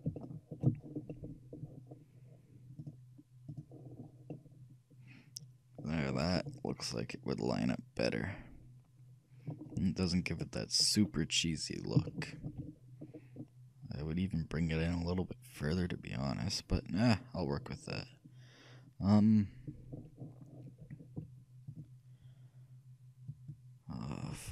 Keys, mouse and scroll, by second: 2.9-4.9 shift+drag, 4.2 middle click, 4.9-8.6 middle drag, 9.7 scroll up 1, 9.9-15.3 middle drag, 15.6-17.6 middle drag, 18.0-19.7 middle drag, 21.7-23.6 drag, 24.3-24.5 drag.